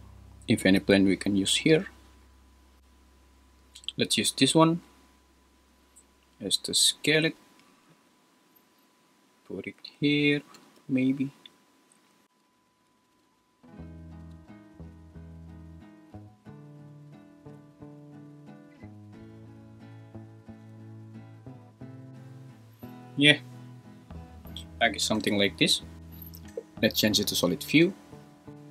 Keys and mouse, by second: 5.7 s, 7.9 g, 9.8 `, 10.5 g, 10.8 y, 11.9 `, 12.4 s, 13.1 g, 13.3 z, 14.3-17.5 typing, 19.5 r, 20.6 g, 20.7 x, 21.4 s, 21.7 g, 26.0 super+s, 28.5 super+z, 28.5 a, 28.5 h.